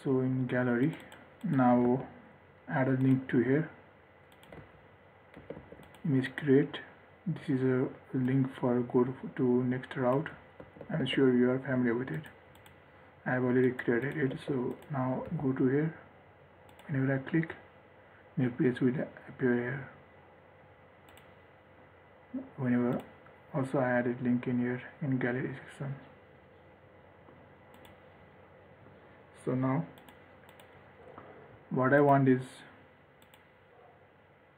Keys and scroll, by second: 2.1 ctrl+s, 4.8 ctrl+z, 5.6 ctrl+s, 10.9 ctrl+s, 14.6 ctrl+s, 15.5 ctrl+r.